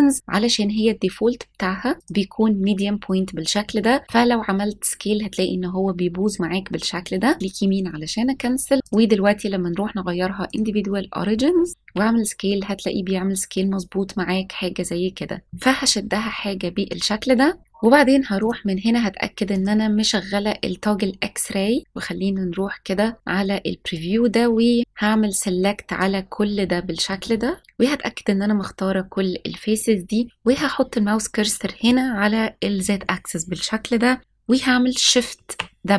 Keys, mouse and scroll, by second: 6.8 right click, 8.8-10.6 drag, 11.8 s, 15.4 click, 16.0-16.9 scroll down 1, 18.3 click, 19.4 click, 23.9-26.0 drag, 27.1 click, 27.6 ctrl+z, 35.2 shift+w.